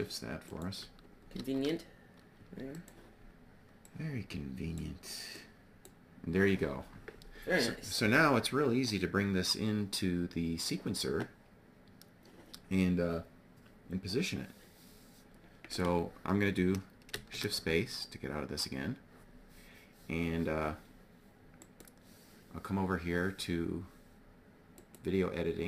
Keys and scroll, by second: 0.8 shift+d, 16.6 shift+space.